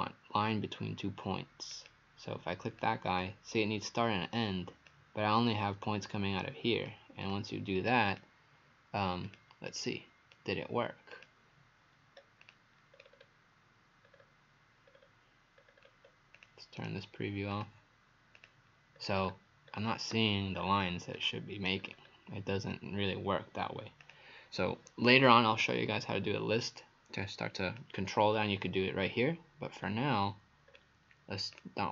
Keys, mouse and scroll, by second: 1.7 click, 9.7 right click, 9.9 right click, 11.1 click, 12.2 Page_Up, 12.4 click, 13.0-13.4 scroll down 5, 14.1-14.6 scroll up 2, 14.9 scroll down 1, 15.0 scroll down 2, 15.6-16.3 scroll up 2, 16.4 click, 16.4-16.8 scroll up 2, 16.8 right click, 17.5 click, 19.0-19.7 scroll down 7, 20.6-21.1 scroll up 4, 21.2 click, 21.8-22.2 scroll up 4, 24.0 click, 29.0 scroll down 2, 29.9-30.7 scroll up 2, 30.7-31.4 scroll down 2, 31.6 click.